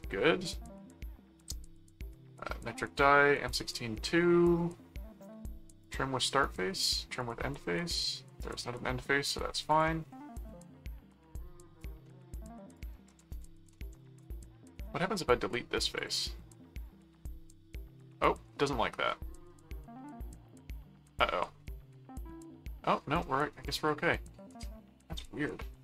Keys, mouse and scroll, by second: 5.8 click, 7.2 click, 8.4 click, 9.7 click, 12.0 middle click, 12.7 click, 12.9-14.3 typing, 14.7 Return, 16.0 click, 16.8 click, 23.3 middle click, 24.5 middle click.